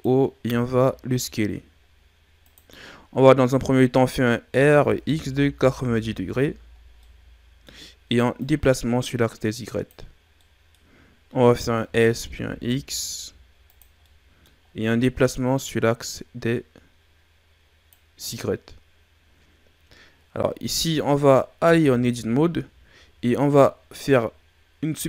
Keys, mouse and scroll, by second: 0.4 s, 4.4 r, 7.0-8.3 middle drag, 8.3 click, 10.3 middle click, 10.9-11.5 scroll up 1, 11.5 scroll up 1, 11.8 s, 14.0 middle click, 14.6 scroll up 2, 15.2 click, 20.6 scroll down 2, 20.9 middle click, 21.6 Tab.